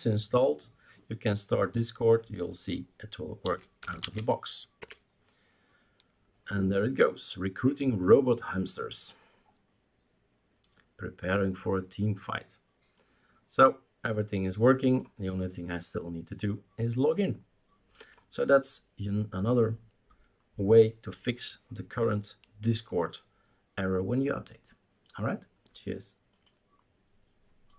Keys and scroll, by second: 3.2-4.7 typing, 4.8 Return.